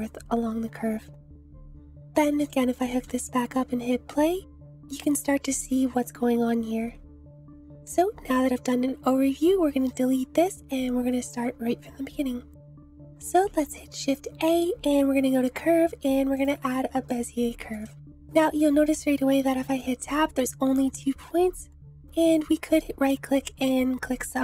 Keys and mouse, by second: 1.2 space, 1.9 Delete, 2.8-4.3 drag, 5.2 space, 7.7 space, 12.5 click, 13.4 shift+a, 17.1-17.7 drag, 18.1 shift+click, 18.6 shift+drag, 19.0 click, 19.5 Tab, 22.5 click.